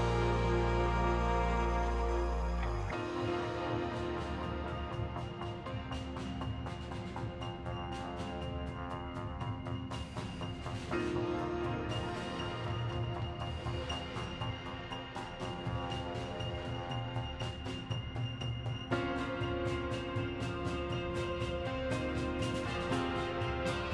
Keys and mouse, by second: 0.2 ctrl+z, 1.0 middle click, 2.0 click, 3.5 click, 5.5 click, 6.8 click, 7.6 click, 8.0 middle click, 8.5 click, 9.0 ctrl+z, 9.1 ctrl+z, 9.2 ctrl+z, 9.5 middle click, 10.2 ctrl+z, 10.5 click, 10.9 middle click, 11.1 ctrl+z, 11.9 ctrl+z, 12.2 middle click, 15.0 click, 15.9 click, 16.8 click, 17.4 click, 17.8 click, 18.7 click, 21.0 click, 22.6 click, 23.7 click.